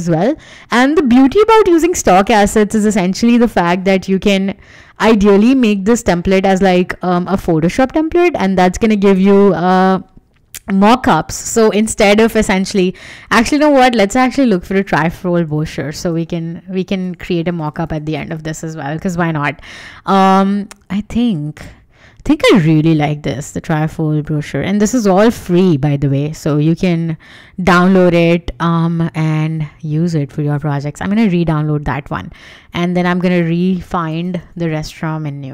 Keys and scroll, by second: 15.2 super+a, 15.2-19.0 typing, 33.2-35.4 typing.